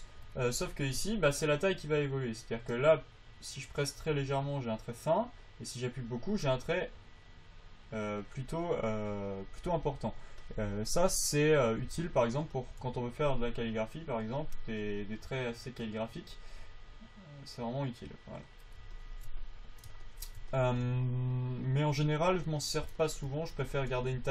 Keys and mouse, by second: 1.8-5.8 drag, 11.3-12.8 drag, 11.3 f, 13.8 click, 22.9-24.0 drag.